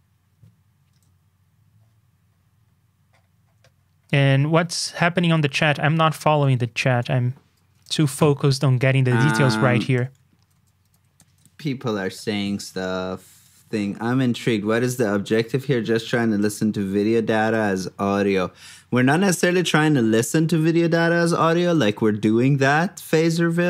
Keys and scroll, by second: 0.9 super+Tab, 8.1 super+c, 8.3 super+Tab, 10.5 super+d, 10.8 super+v, 11.4 super+Tab, 14.5 super+c, 14.6 super+Tab, 16.6 super+d, 16.9 super+v.